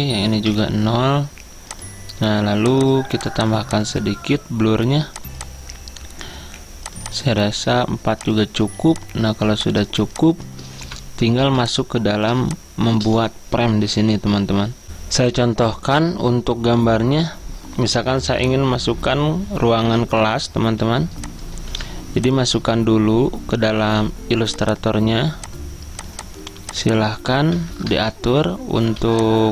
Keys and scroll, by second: 0.6 0, 12.0-13.1 typing, 18.9 alt+Tab, 20.2 alt+Tab, 20.8 z, 21.8 v, 27.7-29.1 typing.